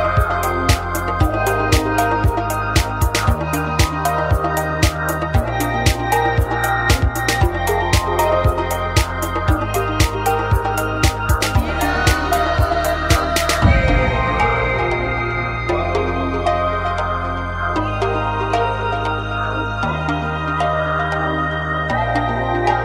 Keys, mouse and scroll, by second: 0.1 click, 0.9-1.9 middle drag, 1.9 f, 2.7 ctrl+z, 3.0-4.2 middle drag, 4.0 a, 4.6-11.0 right drag, 8.3 f, 8.4 a, 10.6 f, 10.7 a, 11.0 click, 11.0-14.1 right drag, 14.1 middle click, 14.1 f, 14.7 a, 14.8 click, 15.6-17.4 right drag, 17.4 f, 18.3 a, 20.8 right click.